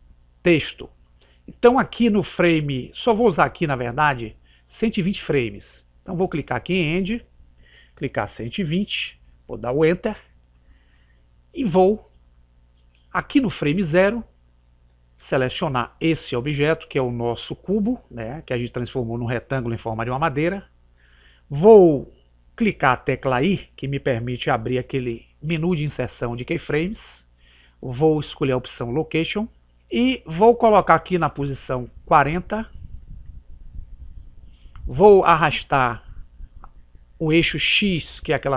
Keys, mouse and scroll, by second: 6.9 click, 25.4 i, 33.0 click, 35.6 click.